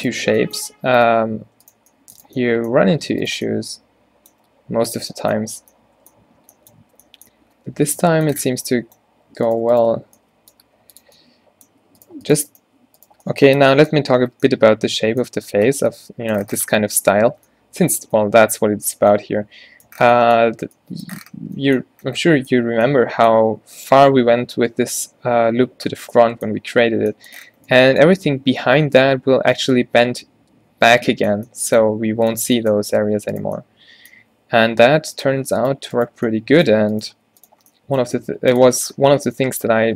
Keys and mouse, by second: 0.3 z, 0.7 g, 1.8 right click, 4.6 g, 5.1 Tab, 5.6 Tab, 6.9 Tab, 8.6 Tab, 9.2 z, 10.1 z, 10.7 e, 13.6 f, 14.3 Tab, 16.9 Tab, 17.3 Tab, 22.9 Tab, 26.0 middle click, 32.3 middle click, 33.0 z, 34.4 e, 37.3 f, 37.8 z, 38.2 g, 38.8 Tab.